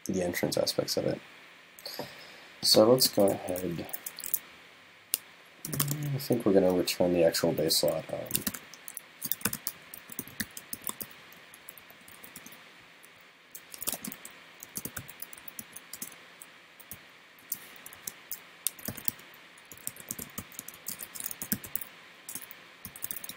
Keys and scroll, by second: 18.0 alt+shift+Left.